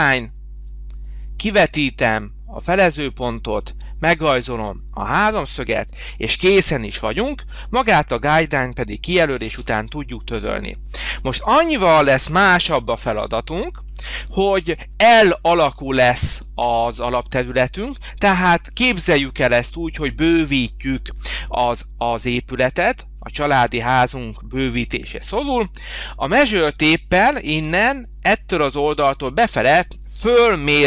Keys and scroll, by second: 6.4 space, 9.6 Delete, 12.6 h.